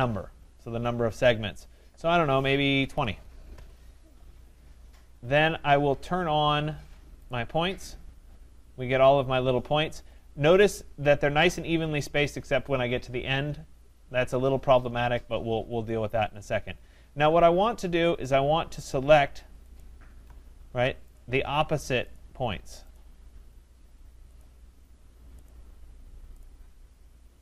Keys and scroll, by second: 3.5 Return.